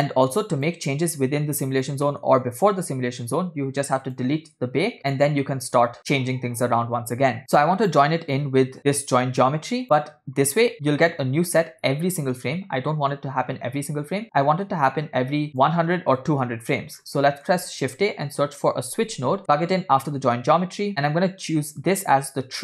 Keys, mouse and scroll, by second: 0.3 click, 1.7-2.1 scroll down 3, 2.1 middle click, 4.1-6.0 drag, 7.4 middle click, 7.6 click, 8.8 drag, 8.9-9.8 drag, 14.4 middle click, 15.5 click, 15.5 middle click, 15.5 scroll down 3, 16.3-16.9 drag, 17.0 scroll up 2, 17.3 middle click, 17.7 shift+a, 20.7 scroll up 2, 21.5-22.6 drag.